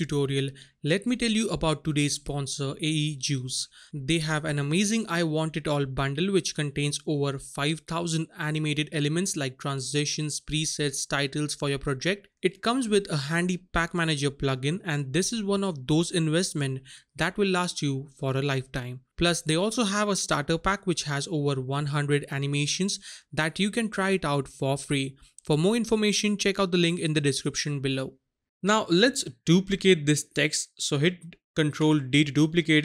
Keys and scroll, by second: 31.8 ctrl+d.